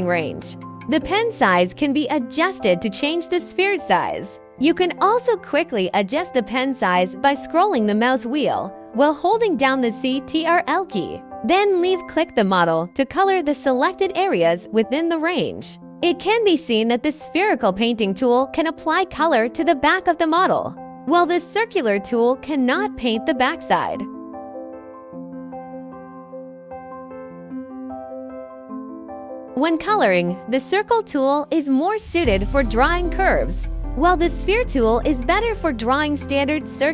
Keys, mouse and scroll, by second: 1.5 click, 3.4 click, 6.5-7.2 ctrl+scroll, 11.7-12.1 scroll, 12.1 click, 16.4 right click, 17.7 right click, 21.8 click, 23.4 scroll, 24.6 click, 25.5 click, 27.2 right click, 29.3 ctrl+z, 30.9-31.2 scroll, 31.2 click, 31.9 click, 32.8 click, 35.6 click, 36.4 click.